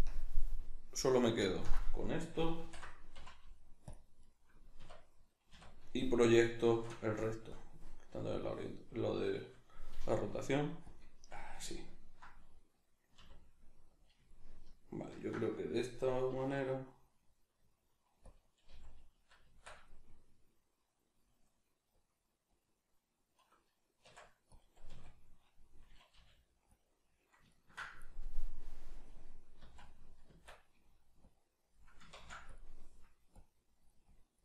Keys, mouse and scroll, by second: 2.6 ctrl+i, 3.2 x, 4.8 \, 5.5 a, 6.7 shift+Tab, 7.6-11.0 drag, 9.9 g, 11.4-14.1 ctrl+middle drag, 13.2 r, 14.1 click, 14.3-18.4 ctrl+middle drag, 16.3 s, 18.4 click, 18.7 g, 19.2 click, 19.5 Tab, 20.7-26.8 drag, 24.0 Tab, 24.9 a, 27.5-31.2 ctrl+middle drag, 29.6 z, 30.3 Tab, 31.2-34.4 drag, 32.1 ctrl+z.